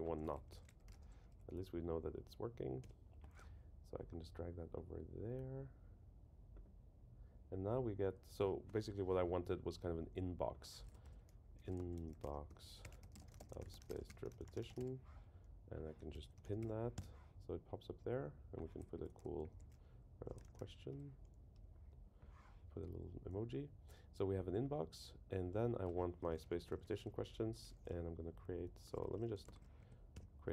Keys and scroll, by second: 2.8 Return, 11.0 shift+super+Left, 16.1 super+k, 16.9 Return, 18.9 super+Left, 21.5 Return, 29.8 Right, 30.1 Return.